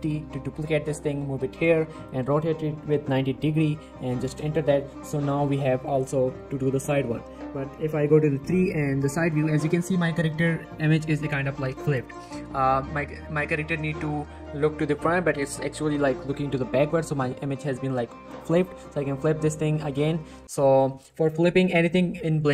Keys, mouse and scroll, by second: 0.1 shift+d, 1.5 click, 2.1 r, 4.9-5.4 middle click, 9.1-9.7 scroll up 2, 9.5 shift+middle click, 9.7 scroll down 1, 9.9 shift+middle click, 12.1 scroll down 1, 12.2 middle click, 12.6-13.0 scroll up 1, 13.2 shift+middle click, 13.6 scroll down 1, 13.8 middle click, 15.3-16.8 scroll up 1, 19.6 g, 19.9 right click, 20.4 middle click, 20.9 scroll down 1, 20.9 middle click.